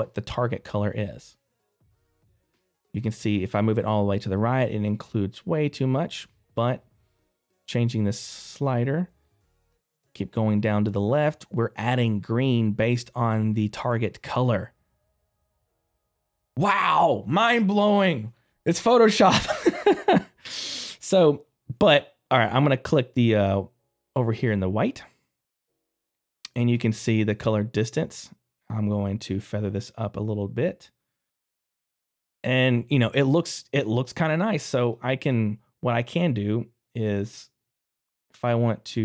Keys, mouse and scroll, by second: 0.9 click, 25.6 middle click, 28.2 click, 32.1 middle click, 34.8 click, 36.5-37.7 scroll up 1, 37.7 click.